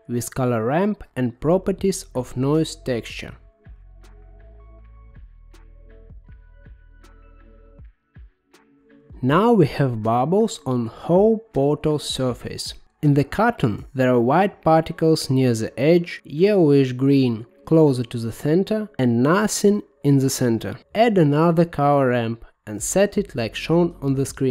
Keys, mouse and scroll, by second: 2.4-6.2 drag, 6.4-8.5 middle drag, 8.5-10.2 drag, 11.3-13.4 drag, 15.0-16.0 drag, 16.0-18.5 scroll down 13, 18.5 middle click, 20.5 shift+d, 24.2 middle click.